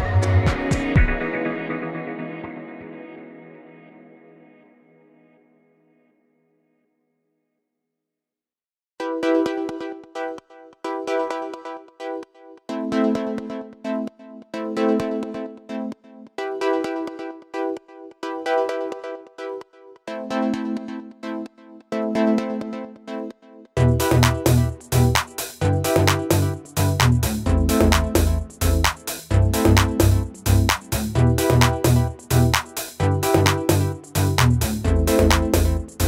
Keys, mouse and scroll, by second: 3.0 click, 4.8 click, 9.4 click, 10.3 Right, 11.9 click, 12.2 scroll up 1, 12.9 scroll down 1, 13.1-13.7 space, 14.4-15.3 drag, 15.8 Delete, 16.7-17.1 scroll up 1, 17.1 space, 17.2 click, 17.4-17.9 space, 18.5 scroll down 1, 18.7 space, 18.8-19.2 click, 19.1 space, 21.1 click, 25.6-26.2 drag, 27.0 ctrl+z, 28.3-29.6 drag, 31.6 Right, 32.6 Down, 34.7-36.0 drag.